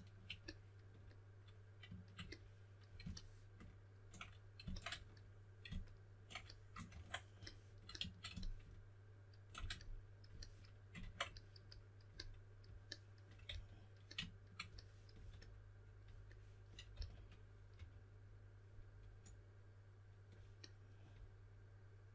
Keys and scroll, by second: 6.8 super+w, 10.9 super+w, 13.4 s, 16.9-18.2 typing.